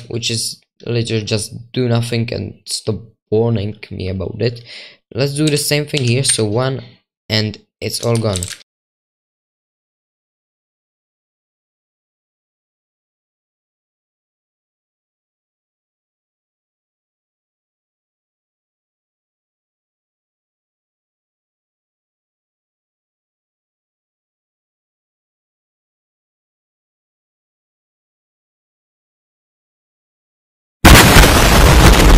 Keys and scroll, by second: 5.7-8.9 typing.